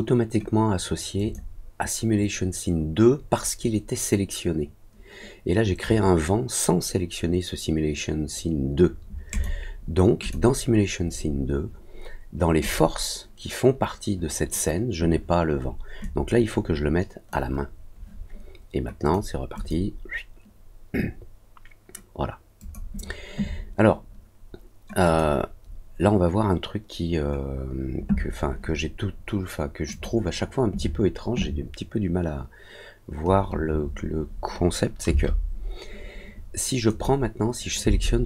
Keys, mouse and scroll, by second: 1.1 click, 9.2 click, 10.2 click, 12.6 click, 16.0-17.2 drag, 19.0 click, 19.5 click, 22.5 click, 25.0 click, 29.8 click, 36.8 click.